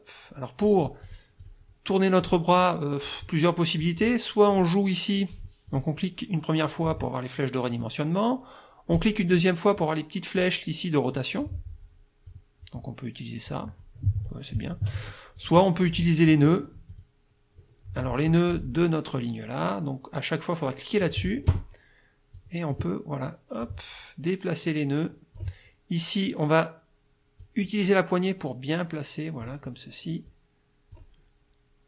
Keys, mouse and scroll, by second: 1.0 click, 1.4 click, 2.2 click, 3.2 click, 4.5 click, 5.3 click, 5.7 click, 9.0 click, 11.4-12.5 drag, 13.5 click, 14.2 ctrl+z, 15.4 ctrl+click, 16.9 click, 21.0 click, 22.4 click, 23.6-25.6 drag, 27.4-29.6 drag, 30.3 click.